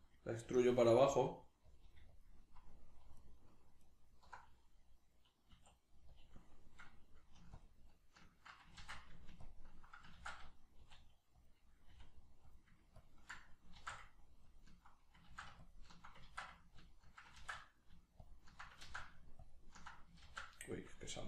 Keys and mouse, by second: 0.4 g, 1.8 click, 1.8 g, 2.2 click, 3.2 alt+right click, 3.8 alt+right click, 5.6 e, 6.2 click, 7.6-8.8 ctrl+drag, 8.8 ctrl+z, 9.4 ctrl+click, 10.2 ctrl+z, 11.5 click, 11.9 r, 13.0 ctrl+click, 13.8 ctrl+z, 14.5 ctrl+click, 15.3 ctrl+z, 15.6 ctrl+click, 16.3 ctrl+z, 16.8 ctrl+click, 17.4 ctrl+z, 18.2 ctrl+click, 18.8 ctrl+z, 19.4 ctrl+click, 20.2 ctrl+z.